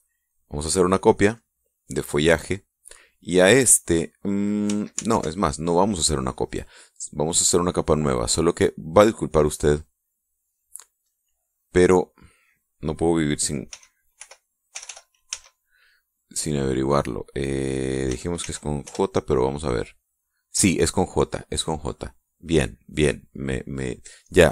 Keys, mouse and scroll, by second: 1.9 click, 5.5 ctrl+z, 7.8 click, 9.9 click, 11.6 click, 14.2 f, 14.8 o, 15.3 l, 15.8 a, 18.6 j, 19.0 e, 19.4 Return, 22.4 click.